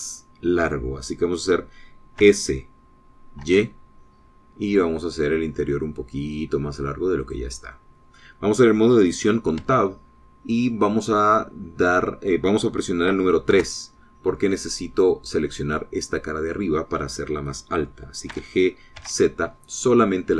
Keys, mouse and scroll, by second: 3.0 s, 4.3 y, 8.0 click, 8.6-10.1 drag, 10.5 Tab, 10.5-14.9 middle drag, 14.5 3, 15.5 click, 19.1 g, 19.8 z.